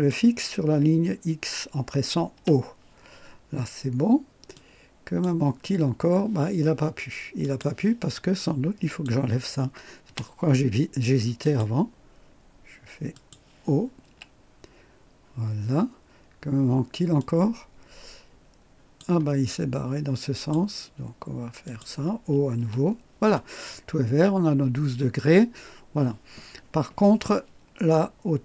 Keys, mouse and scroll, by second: 2.3 o, 4.5-5.4 drag, 5.9 typing, 7.4 click, 8.9 click, 10.1 Delete, 11.4 click, 13.1 click, 14.0 o, 17.2-19.2 drag, 20.3 click, 21.6 click, 22.5 o, 23.7 scroll up 2.